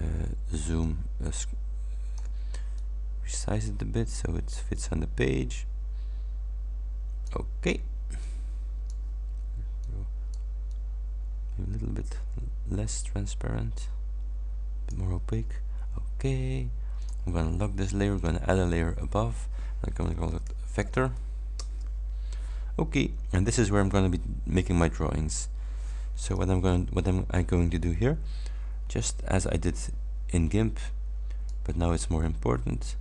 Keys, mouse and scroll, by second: 0.9-2.4 ctrl+shift+drag, 2.8-7.5 drag, 8.3 click, 9.9 click, 10.8-15.2 drag, 17.0 click, 18.2 click, 19.9-20.9 typing, 21.6 shift+Return, 26.7-27.2 ctrl+scroll up 4, 29.8-31.7 drag.